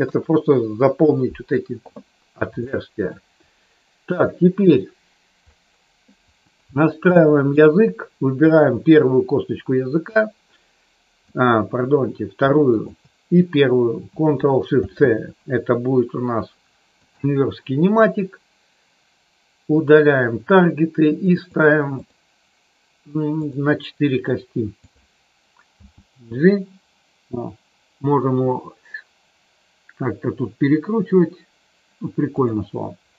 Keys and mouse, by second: 2.7 shift+middle click, 4.0 click, 7.0 shift+middle click, 8.4 click, 11.3 click, 12.8 shift+click, 14.7 ctrl+shift+c, 21.3 click, 23.4 click, 25.8 g, 32.3 click.